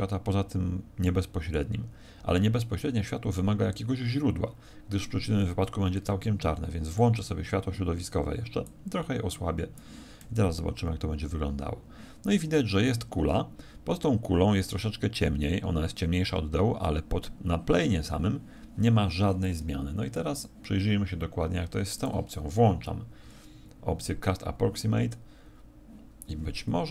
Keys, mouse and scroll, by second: 26.8 Escape.